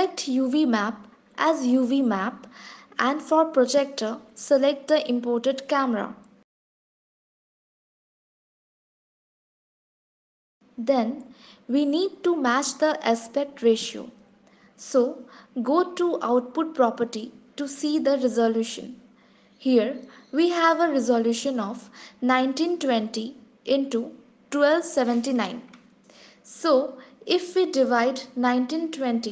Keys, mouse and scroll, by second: 1.1 click, 5.7 click, 17.5 click.